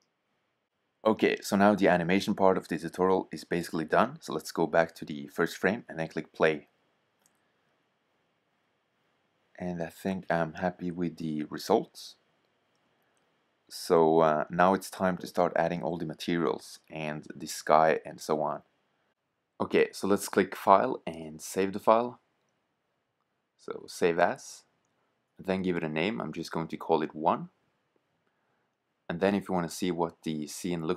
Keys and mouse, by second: 1.0 middle click, 5.8-6.8 drag, 16.4-18.0 drag, 18.0-22.8 middle drag, 22.8-24.1 drag, 27.0 Return, 29.4-30.0 drag.